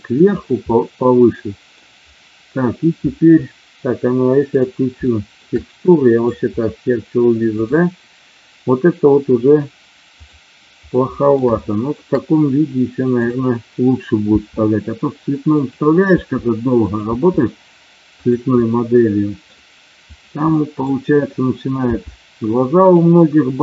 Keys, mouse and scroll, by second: 0.1 click, 0.7 middle click, 5.1 shift+middle click, 5.6 middle click, 7.5-10.6 drag, 11.0 middle click, 11.5-12.0 shift+scroll up 1, 13.2 click, 14.2 e, 15.5 click, 16.1 e, 16.7 click, 17.1 e, 18.6-19.6 middle drag, 20.5 middle click, 21.8 g, 22.8 click.